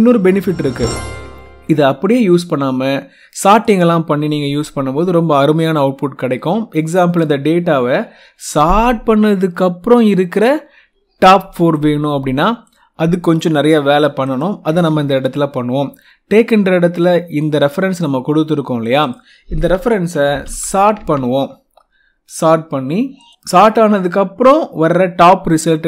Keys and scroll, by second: 1.1 F2, 4.0 Escape, 14.6 F2, 19.9-21.0 typing.